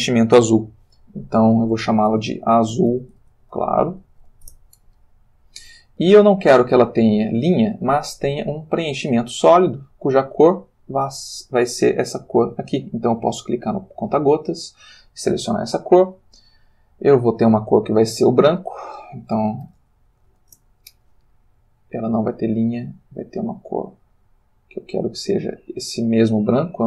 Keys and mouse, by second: 1.3 click, 2.2-4.2 typing, 4.5 shift+Return, 7.4 click, 8.6 click, 9.7 click, 11.3 click, 13.4 click, 16.4 click, 17.1 click, 19.4-20.3 typing, 20.5 Return, 22.1 click, 23.1 click, 24.8 click, 25.9 click.